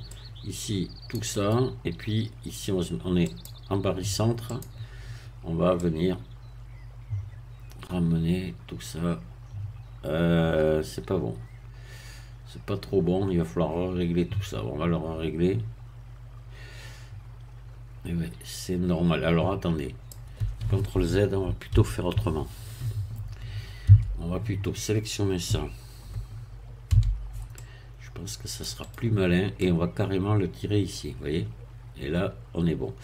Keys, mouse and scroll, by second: 0.1-1.3 drag, 1.4 right click, 3.3 click, 4.5 click, 5.8-20.3 drag, 21.7 ctrl+z, 23.9 a, 26.9 c, 27.6-28.8 drag, 28.8 right click, 29.6-33.0 drag.